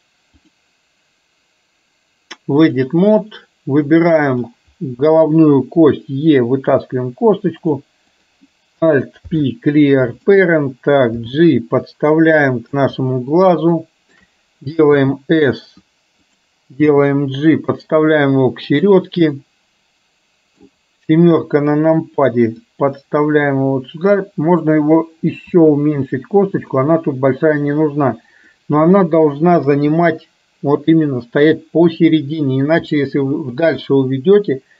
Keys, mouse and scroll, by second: 0.5-3.0 drag, 4.5 click, 6.0 e, 8.2 click, 9.3 alt+p, 11.2 g, 13.8 shift+middle click, 17.0 g, 19.5-20.7 middle drag, 21.5 KP_7, 22.7-24.2 drag, 27.7 click, 29.1 middle click, 29.7 KP_3.